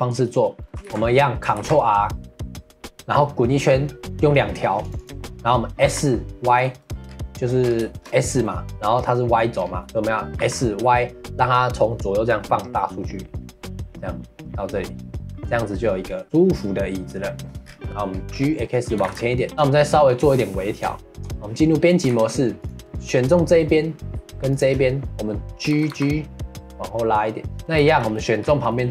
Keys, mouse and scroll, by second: 0.8 ctrl+z, 7.0 scroll down 2, 7.3 middle click, 7.6 scroll down 1, 7.9-9.6 shift+middle drag, 9.6 scroll up 2, 9.8 middle click, 10.4 s, 15.3-17.6 middle drag, 17.6 scroll down 2, 17.8 middle drag, 18.1 scroll up 2, 18.3-19.0 middle drag, 19.0 g, 19.5-20.3 shift+middle drag, 20.3 scroll up 2, 20.5 middle click, 20.8 Tab, 21.7 middle click, 22.0 2, 22.6 click, 23.6 middle click, 24.5 shift+click, 25.0 middle click, 25.7 g, 27.5 middle click, 28.4-28.7 scroll up 2, 28.7 middle click.